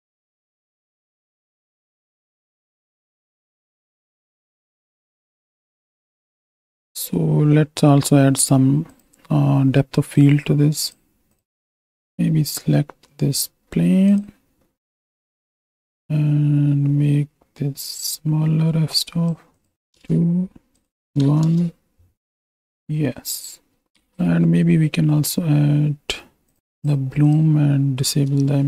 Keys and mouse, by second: 1.4 ctrl+space, 1.4 click, 2.0-5.2 typing, 2.9 click, 4.5 click, 5.2 click, 6.0 ctrl+alt+KP_0, 6.4 ctrl+space, 6.6 shift+middle click, 10.9 click, 15.9-19.3 drag, 19.6 click, 20.8 click, 22.2 ctrl+space, 24.1 ctrl+space, 26.8 click, 28.4 shift+click.